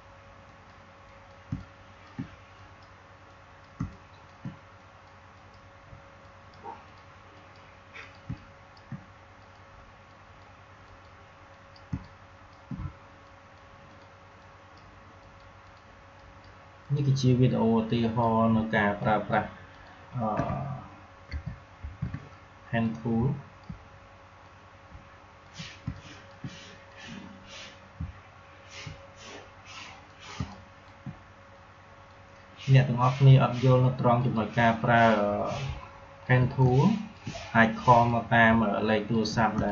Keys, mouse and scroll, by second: 1.4 space, 1.5 click, 1.8 space, 2.4 click, 2.5 click, 3.6 space, 3.8 click, 4.2 space, 4.7 click, 8.2 space, 8.3 click, 8.6 space, 9.3 click, 11.8 space, 11.9 click, 12.3 space, 13.2-19.6 drag, 21.2 ctrl+z, 22.7-24.4 drag, 24.4-25.8 drag, 25.8 space, 25.9 click, 26.2 space, 26.8-30.0 drag, 30.2 space, 30.4 click, 30.7 space, 31.4-36.6 drag, 36.6 click, 36.9 space, 38.0-39.5 drag, 39.5 space.